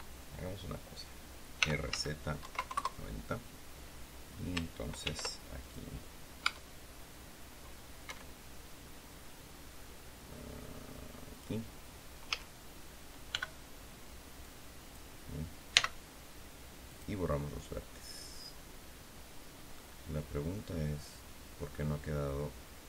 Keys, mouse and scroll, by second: 1.5 r, 1.8 z, 2.3 KP_9, 2.4 KP_0, 2.6 KP_Enter, 4.9 ctrl+r, 5.5 ctrl+click, 6.3 Tab, 8.0 Escape, 11.2 click, 12.2 a, 13.2 b, 14.3 click, 15.6 x, 16.8 click, 19.7-22.8 middle drag.